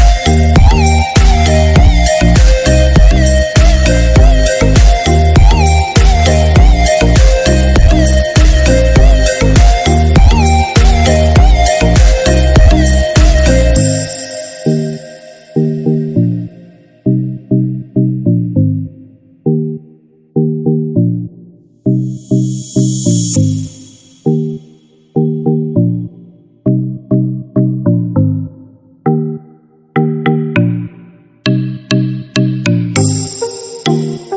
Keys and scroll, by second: 16.9 ctrl+-, 19.2 ctrl+=, 26.0 ctrl+-, 26.9 ctrl+=, 33.8 ctrl+0.